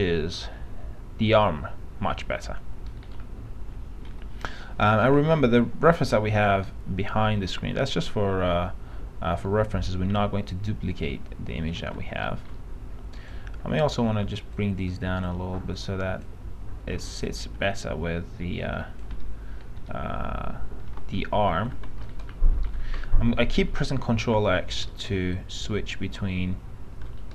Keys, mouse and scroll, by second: 1.0 f, 3.3-4.3 scroll down 1, 4.3 F3, 5.0 F3, 6.5 click, 12.5 middle click, 12.6-13.4 scroll up 1, 13.4 click, 14.3 w, 18.0 click, 19.3 F3, 19.9 F3, 21.0 p, 21.8 alt+x, 22.0 alt+z, 22.3 middle click, 22.8-23.3 alt+scroll down 1, 23.7-24.5 scroll down 1, 25.0-27.3 alt+middle drag.